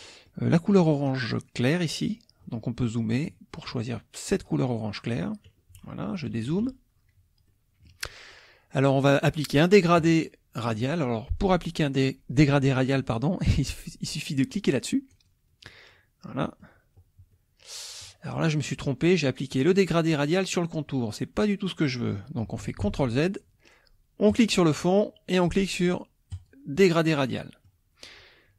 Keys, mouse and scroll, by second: 0.1 click, 2.5 click, 2.6 middle click, 2.6-3.2 scroll up 2, 2.8 middle click, 4.3 click, 5.8 -, 7.5 click, 15.2 click, 16.4 click, 17.3 click, 22.8 ctrl+z, 24.3 click, 26.3 click, 27.1 click.